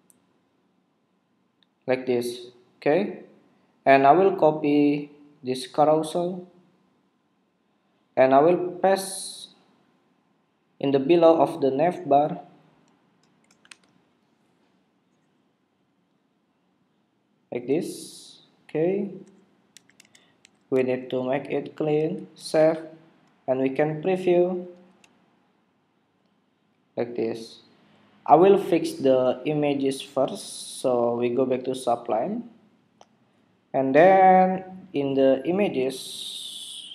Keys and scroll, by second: 14.0 super+v, 22.6 super+Tab, 24.9 super+r.